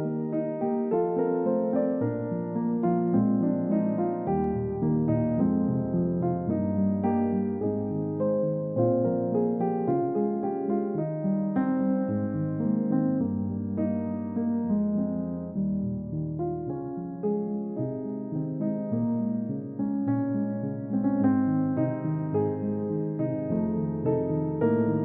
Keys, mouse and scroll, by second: 5.4 scroll down 1, 5.7 middle click, 11.2 shift+click, 23.5 shift+click.